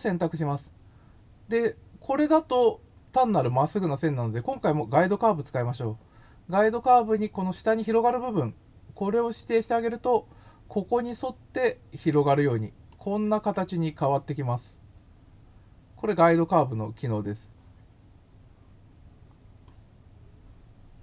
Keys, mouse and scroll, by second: 4.3 click, 11.0 click, 12.8-16.1 middle drag, 19.6-21.0 drag.